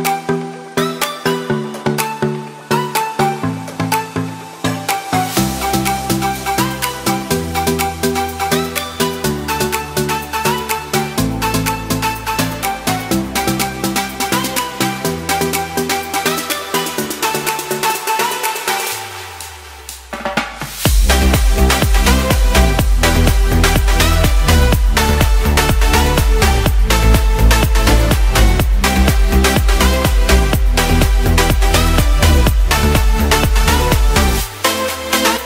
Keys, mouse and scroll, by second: 1.5 middle click, 2.9 c, 13.7 middle click, 15.6 c, 22.8 middle click, 23.9 c, 25.5 middle click, 28.3 shift+click, 29.6 middle click, 30.8 middle click, 34.1 shift+middle click, 34.7 middle click.